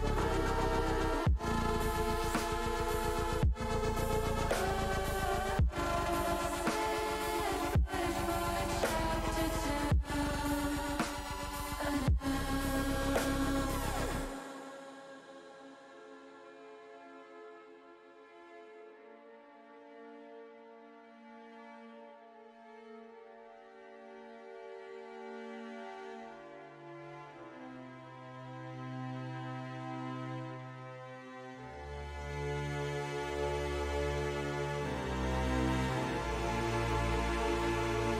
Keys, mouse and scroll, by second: 0.0-1.8 middle drag, 2.3 shift+middle click, 3.2 click, 5.0 middle click, 5.7 middle click, 7.1-8.3 shift+drag, 9.5 ctrl+b, 15.0 click, 15.7 middle click, 17.4 middle click, 17.9 shift+middle click, 18.7 middle click, 20.2 e, 21.0 click, 21.5 ctrl+z, 23.3 s, 24.1 click, 24.4 ctrl+z, 25.1 middle click, 26.1 middle click, 26.9 middle click, 27.6 middle click, 28.5 middle click, 28.9 middle click, 29.7 middle click, 30.0 ctrl+z, 30.4 ctrl+z, 33.0 alt+shift+click, 34.9 ctrl+z, 37.3 middle click, 37.7 middle click.